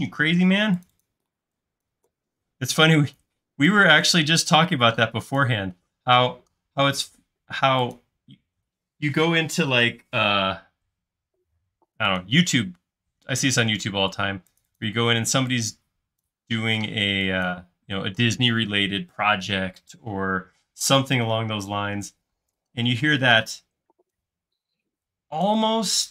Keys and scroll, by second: 0.1 super+z, 0.5 space, 1.3 e, 3.6-4.6 typing, 13.4-15.2 typing, 20.6 space, 22.9 p, 24.3-25.0 typing.